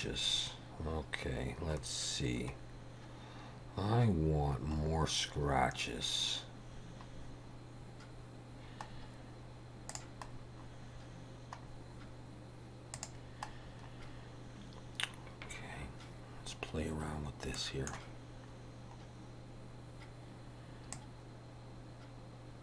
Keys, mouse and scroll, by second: 0.3 scroll down 3, 1.9 scroll down 2, 2.6 scroll up 2, 4.8-5.6 scroll up 7, 6.8-7.6 scroll down 6, 9.0-9.3 scroll down 2, 9.9 click, 10.3-11.0 scroll down 5, 11.6 scroll down 2, 13.1 click, 13.6-14.5 scroll down 6, 16.5 scroll up 2, 17.4 scroll up 1, 17.6 middle click, 18.8 scroll down 1, 21.0 click.